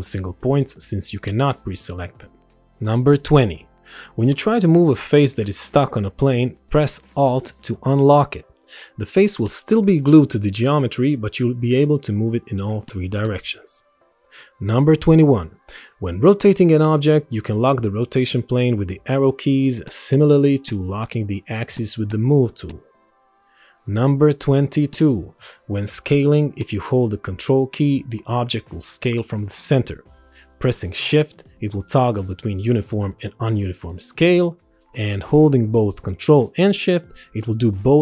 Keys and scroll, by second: 15.8 Up, 16.2 Right, 16.6 Left, 18.5 Up, 21.7 Right.